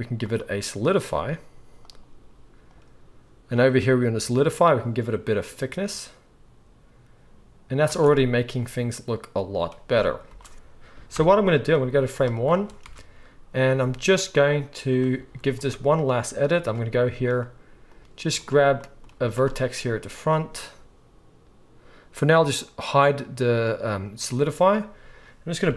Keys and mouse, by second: 10.3 space, 10.5 KP_1, 11.2 shift+Left, 12.2-14.9 shift+middle drag, 12.8 Tab, 14.9-17.9 drag, 15.2 z, 17.9 middle click, 18.2 z, 18.3 click, 18.4-19.6 middle drag, 19.1 z, 20.1 click, 24.0 click, 25.6 g.